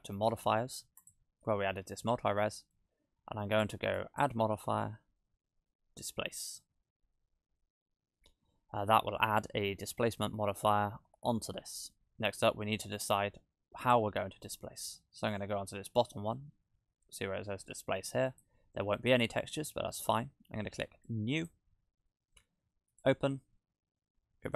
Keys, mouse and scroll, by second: 1.0 click, 4.0 click, 8.8-9.5 scroll down 7, 10.4-11.5 scroll up 4, 11.5 scroll down 1, 11.6 scroll down 1, 13.8 click, 18.3 click, 21.1 click, 22.9 click.